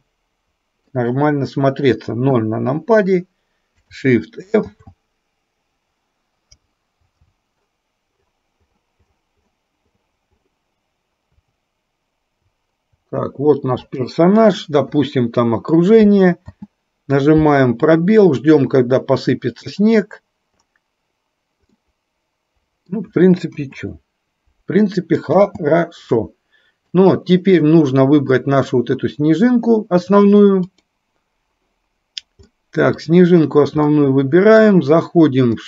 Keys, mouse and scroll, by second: 2.5 KP_0, 4.7 shift+f, 16.6 space, 22.0-23.2 middle drag, 23.7 KP_0, 25.6 space, 32.6 middle click, 34.0 middle click.